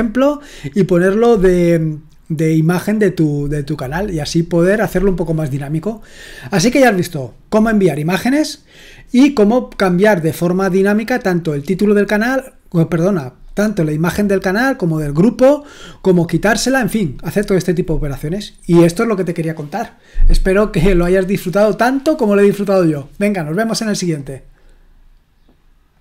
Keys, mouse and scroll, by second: 25.9 click.